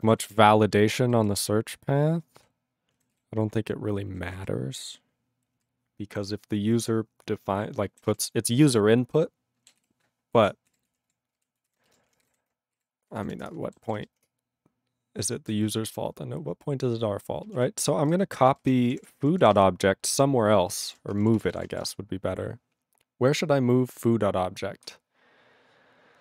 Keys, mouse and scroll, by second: 0.2 ctrl+s, 0.3 ctrl+space, 0.8 ctrl+alt+b, 1.0 ctrl+alt+b, 2.4 ctrl+g, 3.1 ctrl+s, 4.1 ctrl+a, 4.3 ctrl+space, 4.4 ctrl+e, 5.6 ctrl+g, 8.1 ctrl+s, 9.8 ctrl+s, 10.5 ctrl+s, 10.6-12.8 typing, 13.1 ctrl+r, 13.2 ctrl+r, 13.5 Return, 13.9 ctrl+s.